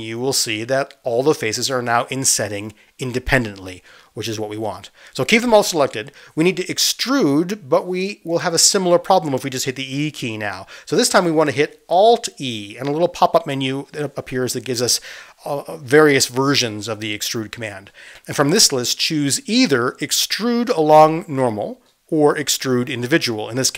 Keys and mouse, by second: 0.0-1.6 drag, 1.6 middle click, 1.8 click, 2.0-3.3 middle drag, 3.3 right click, 4.0-23.7 middle drag, 12.6 alt+z, 14.6 alt+e.